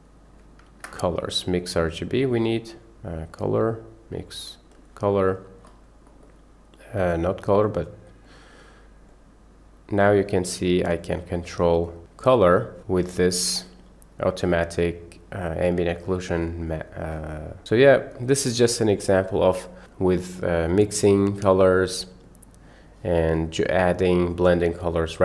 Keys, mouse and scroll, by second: 0.7 shift+a, 6.2 middle click, 7.2 click, 8.3 click, 10.9 drag, 12.0 middle click, 12.6 middle click, 13.3 click, 13.7-15.7 middle drag, 16.4 middle click, 17.9 middle click, 18.9 middle click, 21.3 click, 22.3 click, 22.5 click.